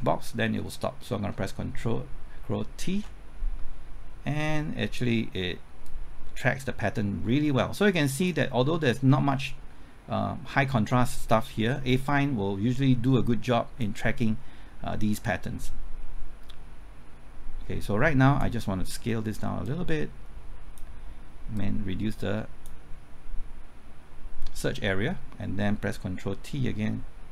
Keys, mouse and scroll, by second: 2.9 ctrl+t, 5.8-23.2 drag, 26.1 typing.